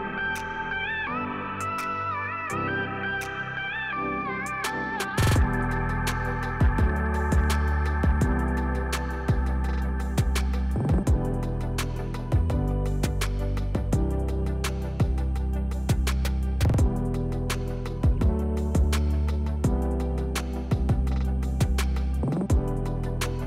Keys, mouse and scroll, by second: 0.5 click, 0.7 s, 1.5 click, 1.8 e, 2.5 click, 2.8 s, 3.7 click, 3.8 scroll down 1, 5.6 Tab, 5.9 click, 7.0 click, 7.7 shift+a, 9.5 scroll down 1, 10.3 s, 10.9 click, 11.1 g, 11.8 click, 12.0 scroll up 1, 12.6 s, 13.6 click, 14.5 g, 15.3 click, 15.5 s, 16.3 click, 17.3 e, 18.0 Escape, 18.5 g, 19.6 click, 19.8 scroll up 1, 20.0-20.4 scroll down 1, 20.6 Tab, 21.1 middle click, 21.8 click, 22.1 click, 22.7 click, 23.0 click, 23.2 click.